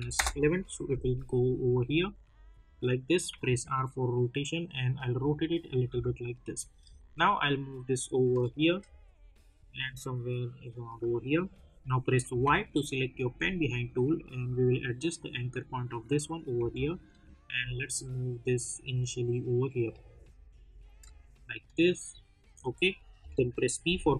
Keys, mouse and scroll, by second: 0.1 Return, 2.6 click, 3.2 w, 3.7-5.8 drag, 5.8 v, 6.7-8.7 drag, 8.7-12.2 drag, 12.2 y, 14.4-16.5 drag, 16.5 v, 17.0-20.9 drag, 20.9-23.2 drag, 23.2 p, 23.8 click.